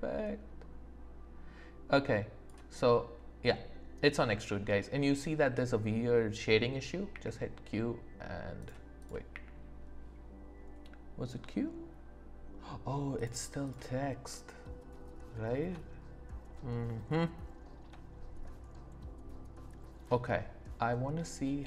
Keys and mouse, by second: 7.1 q, 9.0 click, 9.3 q, 13.1 click, 13.6 click, 14.3 middle click.